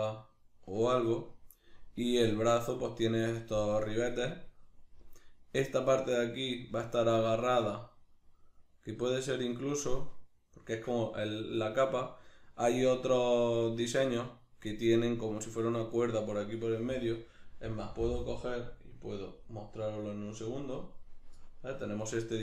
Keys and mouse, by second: 5.0 middle click, 14.0 middle click.